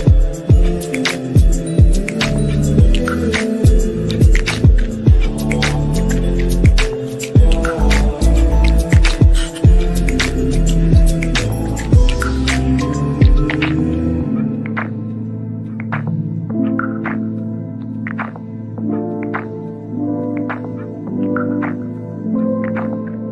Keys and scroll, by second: 2.5 F3, 3.0 Escape, 7.7 g, 16.5 g.